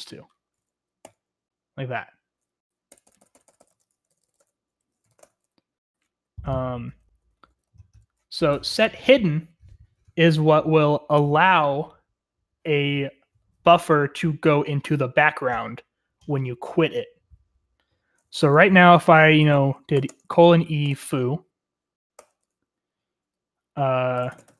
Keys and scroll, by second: 1.0 ), 3.1-7.7 typing, 3.7 Escape, 11.3-12.0 typing, 19.8-22.1 typing, 22.5 Return, 24.2-24.5 typing.